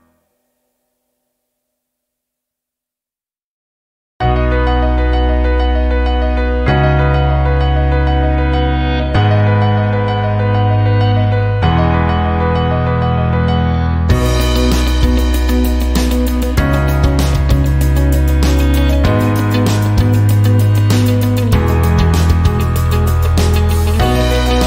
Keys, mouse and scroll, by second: 0.0-0.6 typing, 3.5 click, 5.7 click, 6.9 click, 8.6 BackSpace, 10.0 KP_1, 10.3 KP_0, 12.3 click, 17.8-20.8 typing, 22.6 BackSpace, 24.2 click, 24.5-24.6 typing.